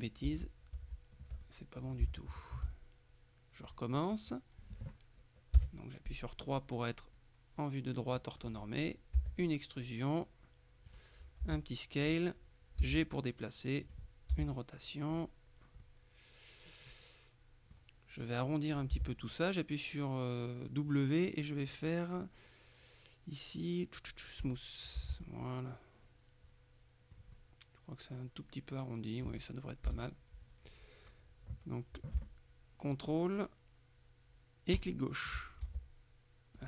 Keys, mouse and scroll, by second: 0.4 ctrl+z, 1.5 ctrl+click, 1.9 shift+middle click, 2.8 shift+middle click, 5.6 KP_3, 9.3 e, 11.0 click, 11.5 s, 12.1 click, 12.9 g, 13.9 click, 14.4 r, 15.2 click, 15.9-18.3 middle drag, 19.0 w, 24.5 click, 25.1 w, 25.3 click, 25.9-27.7 middle drag, 30.0 KP_3, 34.8 ctrl+click, 35.7 ctrl+s.